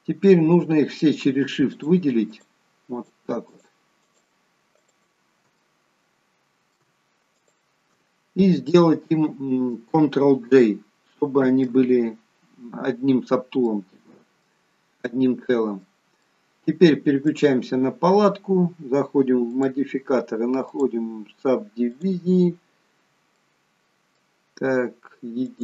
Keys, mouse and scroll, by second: 1.7-5.5 shift+click, 5.5 middle click, 7.2 shift+click, 11.4 ctrl+j, 13.5 middle click, 15.0 middle click, 17.1 click, 19.4 click, 23.4 middle click, 25.3 click.